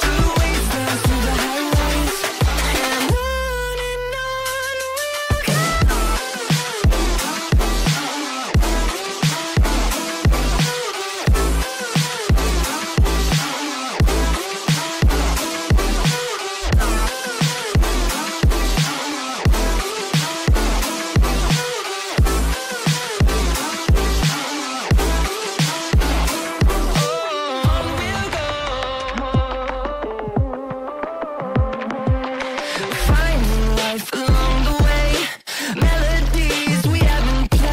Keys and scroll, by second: 3.6 space, 7.4 shift+Page_Down, 7.8 F4, 8.2 Escape, 11.0 shift+F2, 11.3 F3, 14.4 F2, 19.1 space, 21.9 Delete, 22.4 space, 29.9 space, 32.1 Escape.